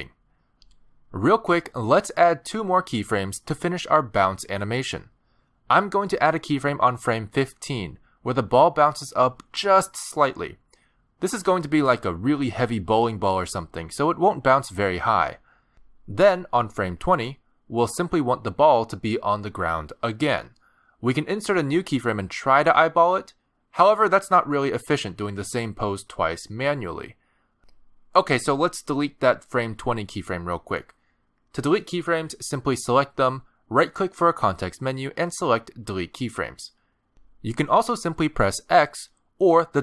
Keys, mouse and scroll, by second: 0.0-0.3 scroll down 1, 0.3-1.1 ctrl+scroll up 1, 1.9-2.3 ctrl+scroll down 1, 9.0-10.3 alt+scroll up 8, 11.3 middle click, 12.2-12.5 scroll up 2, 12.5 g, 16.0 middle click, 16.9-18.3 scroll down 1, 18.3 click, 18.8 middle click, 19.8-20.3 scroll up 3, 20.3 middle click, 20.6 shift+middle click, 20.8 scroll down 1, 20.9 g, 22.6 middle click, 23.6 g, 26.4 middle click, 30.8 click, 34.7 right click.